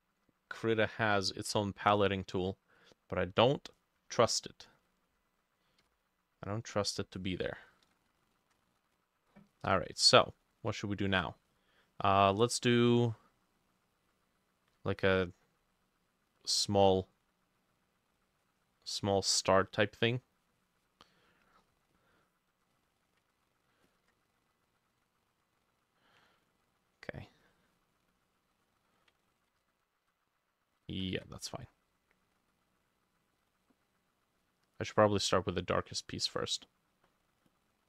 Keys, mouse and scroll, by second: 3.8-5.8 drag, 5.8 Insert, 5.8-7.8 drag, 8.1-25.9 ctrl+drag, 29.1-37.8 ctrl+drag, 29.1-30.4 ctrl+middle drag, 29.4 ctrl+z, 29.6 ctrl+z, 30.8 ctrl+shift+middle click, 30.9 ctrl+shift+z, 31.2 ctrl+shift+z.